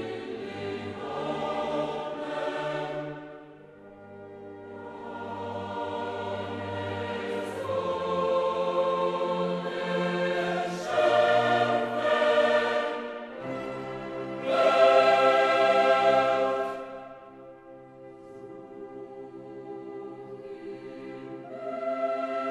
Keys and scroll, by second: 12.1 ctrl+t.